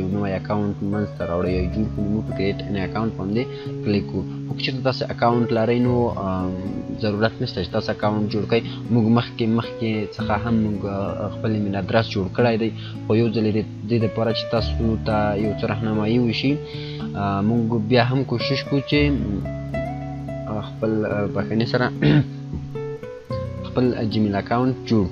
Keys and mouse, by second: 3.6 click, 4.4 click, 19.3 click.